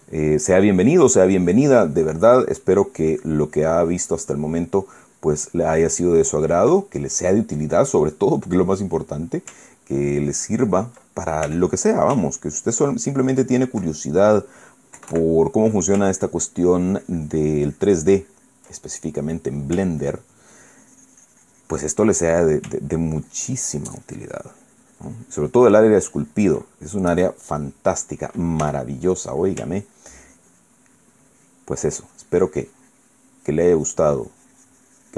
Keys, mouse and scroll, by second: 7.5-10.3 ctrl+middle drag, 10.6-11.8 ctrl+drag, 12.2 f, 12.6-14.6 ctrl+drag, 14.7 ctrl+middle click, 15.7 KP_Add, 16.8-19.5 ctrl+drag, 19.5 ctrl+middle click, 20.7-22.8 ctrl+drag, 22.8 ctrl+middle click, 23.6-27.3 ctrl+drag, 27.3-29.4 ctrl+middle drag, 29.3 f, 29.8 click, 30.5-35.1 ctrl+drag.